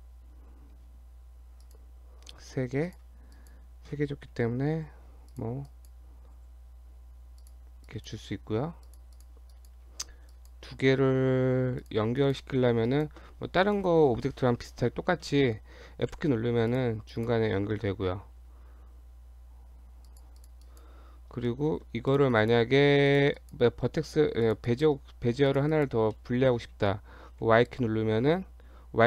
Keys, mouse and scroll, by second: 2.9 click, 3.4 click, 4.8 g, 5.7 click, 6.4 g, 7.9 click, 8.4 g, 9.2 click, 9.6 click, 10.3 shift+click, 11.8 click, 12.2 click, 12.9 shift+click, 16.1 f, 16.7 click, 17.1 click, 18.4 r, 20.4 click, 20.7 click, 21.5 shift+middle click, 22.1 click, 22.4 click, 23.4 click, 24.1 shift+middle click, 24.5 click, 24.7 click, 25.5 click, 25.7 click, 26.1 shift+middle click, 27.4 y.